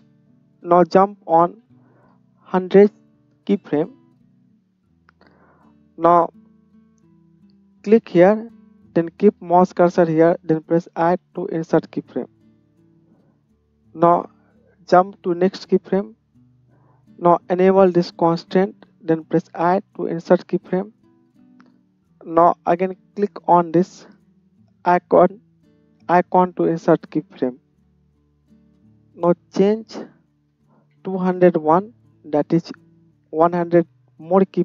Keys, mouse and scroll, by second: 2.0 KP_0, 8.0-14.0 middle drag, 14.0-18.2 drag, 18.2-24.7 middle drag, 24.7 click, 24.8-28.3 middle drag, 28.3-34.6 drag.